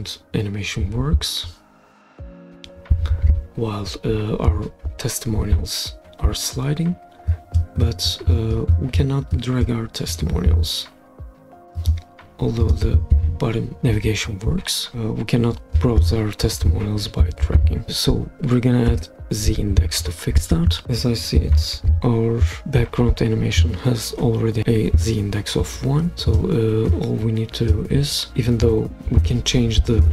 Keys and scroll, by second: 18.9 Escape.